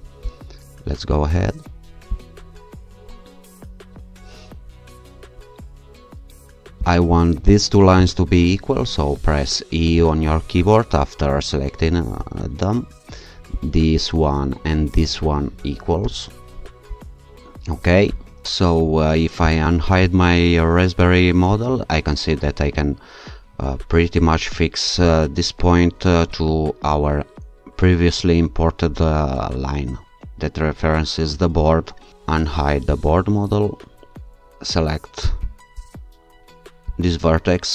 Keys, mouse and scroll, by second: 2.1 shift+click, 4.8-5.6 scroll up 2, 6.8 click, 8.0 click, 9.9 e, 13.5 shift+click, 15.0 click, 16.0 e, 19.5 click, 21.6-22.5 scroll up 2, 25.1 click, 32.9 click, 35.5 click, 36.9 click.